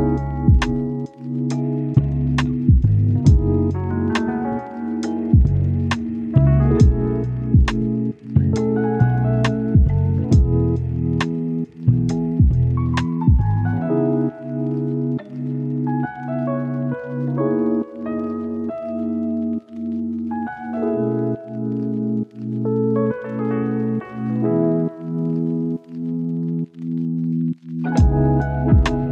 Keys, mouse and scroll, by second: 2.9 click, 3.3 scroll down 1, 3.4 scroll up 1, 3.5 right click, 4.1 scroll up 1, 4.2 right click, 5.8 click, 7.0 right click, 7.3 scroll down 1, 7.4 scroll up 1, 7.5 right click, 8.4 scroll down 1, 8.5-9.3 scroll up 2, 8.6 right click, 9.3 click, 11.4 scroll down 1, 11.5 scroll up 1, 11.6 click, 11.8 right click, 12.0 scroll down 1, 12.1 scroll up 1, 12.3 right click, 13.0 click, 13.6-15.4 right drag, 15.4-15.8 scroll down 1, 15.8 right click, 16.1 scroll down 1, 16.3 scroll up 1, 16.4 right click, 17.3 scroll up 1, 17.9 right click, 19.3 click, 19.8 right click, 20.2 scroll up 1, 20.3 right click, 22.2 click, 22.4 right click, 23.1 click, 23.2 scroll down 1, 23.3-24.0 scroll up 1, 24.0 scroll down 1, 24.1-25.5 scroll up 1, 25.5-27.5 right drag, 27.8-28.2 scroll up 1, 28.2 click.